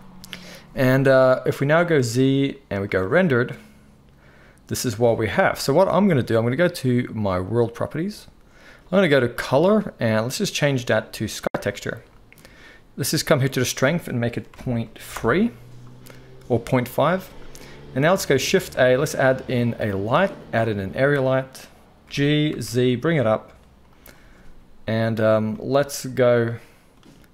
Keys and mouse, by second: 0.8-7.7 middle drag, 2.0 z, 7.7-9.3 right drag, 18.4 shift+a, 21.2-24.0 drag, 21.2-24.0 middle drag, 21.2-27.3 right drag, 22.0 g.